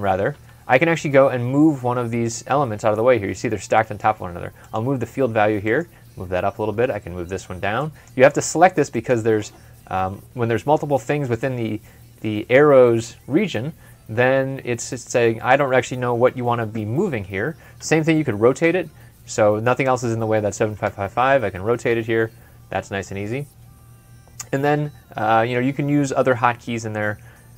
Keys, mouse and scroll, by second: 6.6 typing, 18.5 typing, 20.7-21.7 typing.